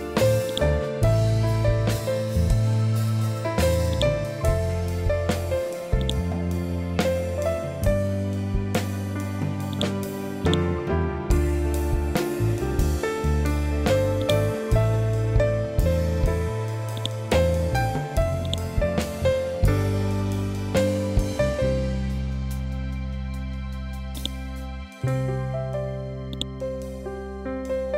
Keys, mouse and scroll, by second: 7.1 scroll down 1, 9.6-12.1 drag, 12.1-12.8 scroll up 1, 14.1-20.0 drag, 20.0-20.7 scroll up 1, 21.1 ctrl+scroll up 1, 21.3 ctrl+Home, 24.1-27.9 drag.